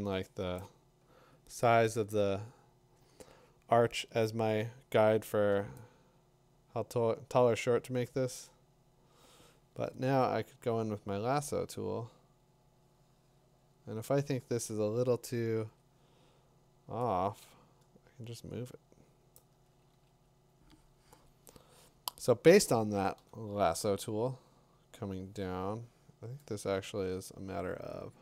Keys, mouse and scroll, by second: 0.4 Tab, 0.6 click, 8.3 l, 10.1 click, 15.7 v, 19.3 click, 19.9 ctrl+d, 23.2 b.